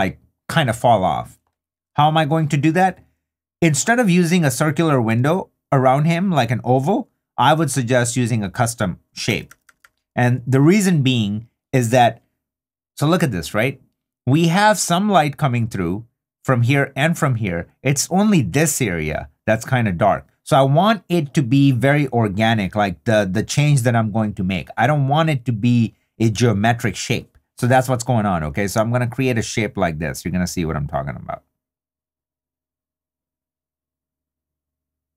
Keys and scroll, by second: 9.3 2.